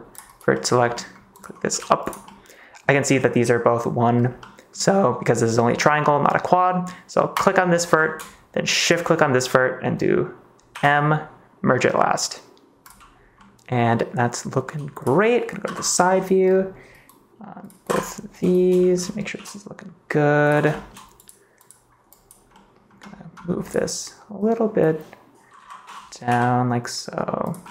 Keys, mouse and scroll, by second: 0.5 middle click, 0.9 middle click, 1.3 click, 2.0 g, 2.3 middle click, 4.3 middle click, 6.5 middle click, 8.8 shift+click, 10.6 m, 13.3 click, 13.7 middle click, 14.6 g, 14.9 click, 15.6 KP_3, 18.7 shift+middle click, 19.3 g, 20.4 click, 20.6 shift+middle click, 22.0 click, 22.5 middle click, 25.5 KP_3, 26.2 g, 27.4 click, 27.4 middle click, 27.6 middle click.